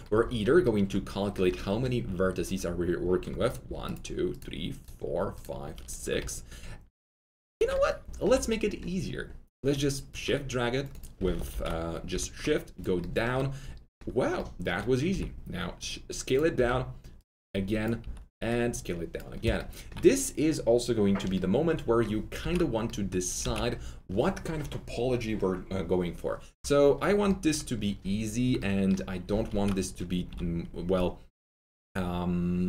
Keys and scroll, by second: 11.4 shift+x, 15.0 alt+shift+r, 16.5 w, 17.9 r, 22.3 ctrl+z, 27.1 ctrl+z, 29.5 ctrl+alt+z, 30.2 ctrl+alt+w.